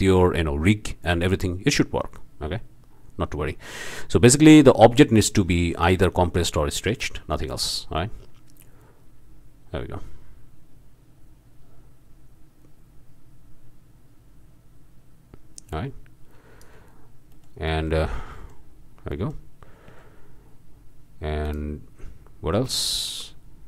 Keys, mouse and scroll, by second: 1.1 scroll down 1, 5.0 i, 5.7 i, 6.6-7.1 alt+drag, 7.7-17.2 drag, 17.3 click, 18.4-18.7 drag, 19.1 click, 21.4 drag, 22.8-23.1 drag.